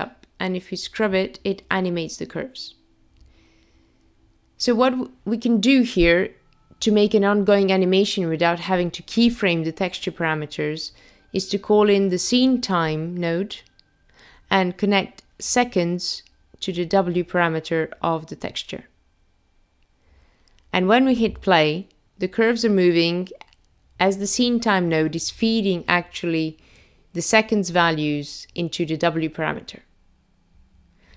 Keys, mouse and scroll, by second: 0.7 click, 2.2 click, 6.4 click, 10.3 click, 11.6 click, 12.5 shift+a, 12.7 click, 20.8 click, 22.6 space, 27.8-28.9 scroll up 2, 28.9-30.2 scroll up 1, 30.2-30.6 scroll down 1.